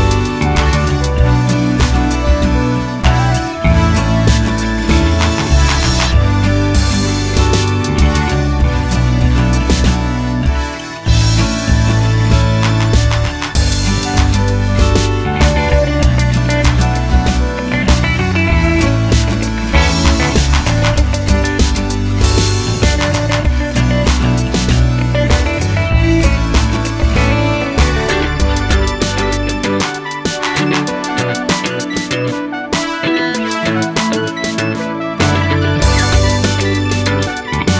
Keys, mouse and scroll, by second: 0.4 click, 1.1 ctrl+r, 4.5 1, 4.9-7.6 drag, 5.9 g, 8.0-14.6 middle drag, 12.1 scroll up 2, 12.4 2, 12.6 3, 14.2 z, 14.6 click, 15.0 ctrl+click, 15.1-17.4 middle drag, 17.4 click, 18.4 click, 18.7 middle click, 19.4 ctrl+click, 20.5 middle click, 21.2 click, 21.5 x, 21.7 middle click, 21.9 scroll up 1, 22.1 shift+middle click, 22.4 click, 22.9 middle click, 24.1 middle click, 24.1 x, 24.9 middle click, 24.9 2, 25.0 click, 25.5 shift+click, 26.1-29.4 shift+middle drag, 27.2 scroll up 2, 27.4 scroll down 2, 27.6 KP_Decimal, 28.9 scroll down 2, 29.4 click, 30.0 x, 30.3-32.1 middle drag, 32.1 click, 32.7 f, 33.0 click, 33.1-34.8 shift+middle drag, 33.2-34.3 scroll down 2, 34.8 click, 35.0-37.1 middle drag, 35.1 scroll down 1, 35.6 Tab, 37.1 click, 37.4 Tab.